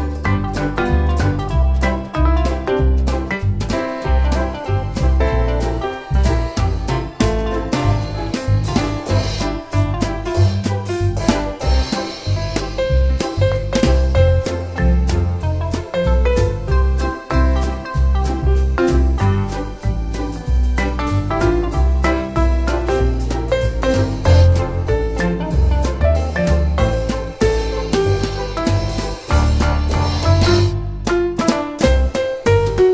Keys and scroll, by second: 3.0 super+c, 3.2 super+v, 21.8 1, 21.9 Return, 24.4 super+c, 24.6 super+v.